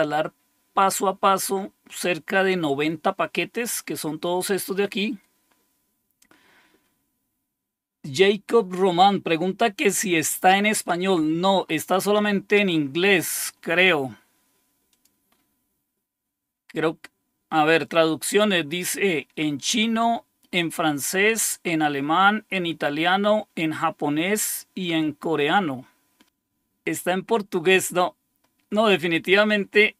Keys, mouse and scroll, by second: 1.2-1.9 scroll down 2, 3.2-3.8 scroll down 2, 3.8-10.3 scroll up 2, 10.3-13.5 scroll up 3, 14.8 click, 16.3 scroll down 2, 19.8-21.9 scroll down 5, 22.5-23.3 scroll down 2, 27.5-28.4 scroll up 2, 29.0-29.7 scroll up 2.